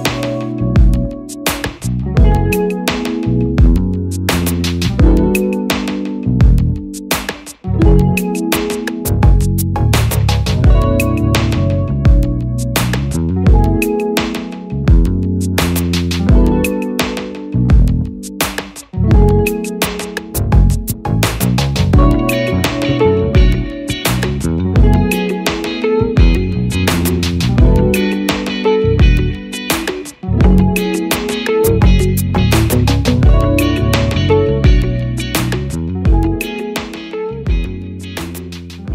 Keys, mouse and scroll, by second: 0.9 click, 6.1 double click, 9.6 Return, 13.8 click.